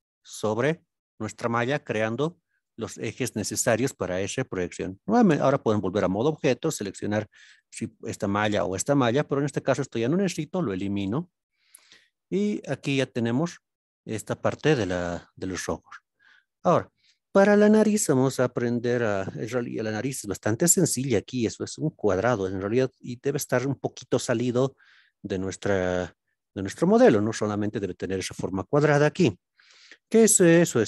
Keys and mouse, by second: 5.3 Tab, 6.0 middle drag, 7.4 click, 8.6 click, 10.5 x, 11.7 click, 12.5 Tab, 13.0 middle click, 20.6 alt+z, 24.7 alt+z, 25.1-25.4 middle drag, 26.1-26.5 shift+middle drag, 30.8 KP_1.